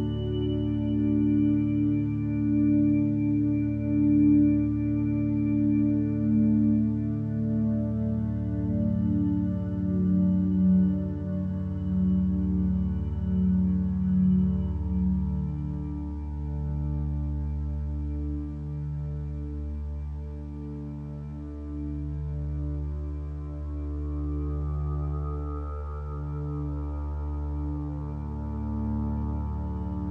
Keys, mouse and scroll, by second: 4.1 ctrl+space, 10.1 x, 10.8 ctrl+space, 12.2-13.8 drag, 15.1 ctrl+z.